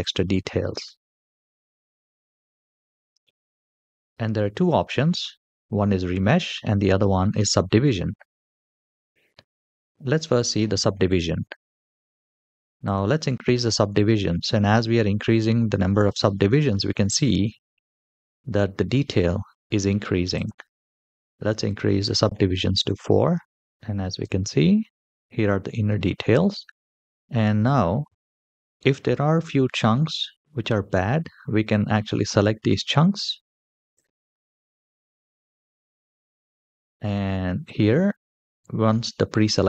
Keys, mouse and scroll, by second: 2.3-4.0 scroll down 4, 12.6 click, 14.5-15.6 scroll up 5, 15.7-16.3 shift+middle drag, 20.1 click, 23.6 click, 23.6 middle click, 23.6 g, 24.0 g, 26.5-26.9 middle drag, 28.1-28.4 shift+middle drag, 28.7 middle click, 29.3-30.4 scroll down 2, 30.4-31.1 scroll up 3, 31.4-32.0 drag, 32.5-32.8 scroll down 3, 33.7-34.1 ctrl+drag, 34.7-35.0 ctrl+drag, 36.9-37.8 scroll up 1.